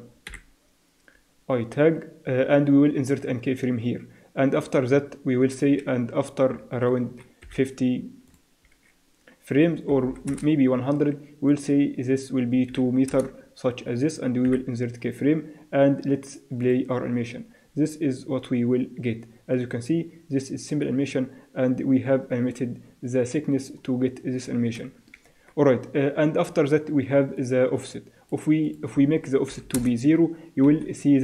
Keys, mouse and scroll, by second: 0.3 i, 4.6-6.4 drag, 7.4 5, 8.3-10.0 drag, 10.1 0, 11.5-13.3 drag, 14.5 i, 16.6-18.4 drag, 25.3 Escape, 27.4 click, 28.9-30.3 drag, 30.7 KP_1.